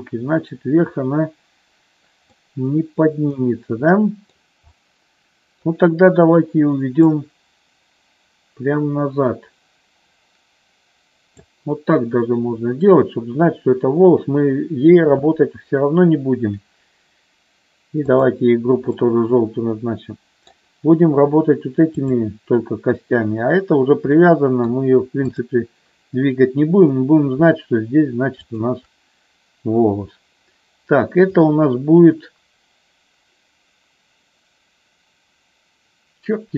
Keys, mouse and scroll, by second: 2.3-4.4 middle drag, 5.0 middle click, 7.1-11.6 drag, 18.1 click, 19.1-20.6 middle drag, 21.9-23.5 drag, 24.2 middle click, 25.3-26.7 drag, 31.5-36.5 drag.